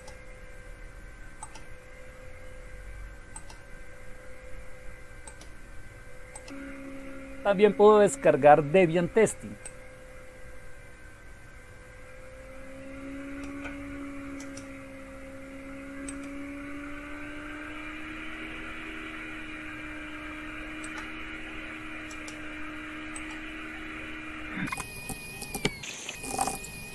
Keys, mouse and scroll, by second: 1.4 click, 3.3 click, 5.2 click, 6.5 ctrl+-, 9.3 click, 9.7-13.5 drag, 16.1 click, 20.8 click, 22.3 right click, 23.1 click, 24.7 Right, 25.1 Return, 25.4-26.9 typing.